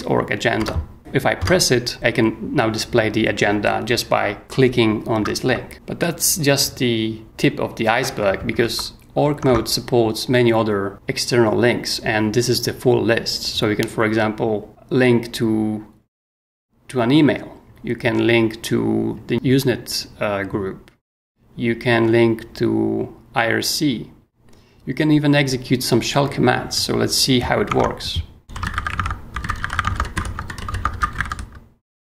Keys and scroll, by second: 0.6 Return, 1.0 h, 1.4 Return, 5.7 super+4, 8.6 super+Tab, 27.7 super+Tab, 28.3-32.0 typing.